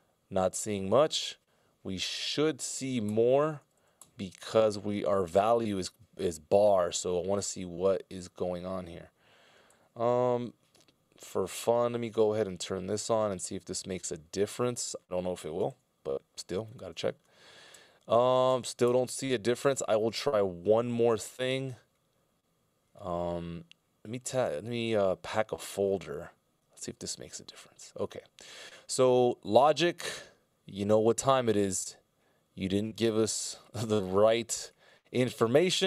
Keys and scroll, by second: 3.5 ctrl+alt+Right, 3.7 ctrl+alt+Right, 4.5 ctrl+alt+Right, 9.7 super+f, 15.9 f, 17.1 ctrl+alt+Right, 17.7 ctrl+alt+Left, 18.3 ctrl+alt+Right, 19.1 ctrl+alt+Right, 27.7 ctrl+alt+Right, 28.6 ctrl+alt+Left.